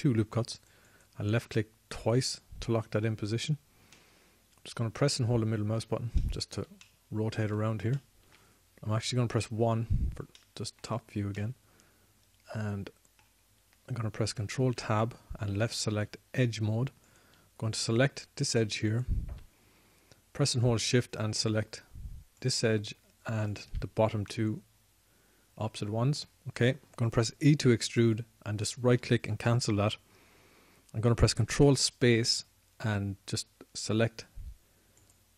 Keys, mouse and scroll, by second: 2.2-5.2 drag, 5.2-6.4 middle drag, 10.1 KP_1, 15.7 ctrl+Tab, 17.1 ctrl+Tab, 26.4 middle click, 28.5 e, 29.3-31.6 drag, 32.7 ctrl+space.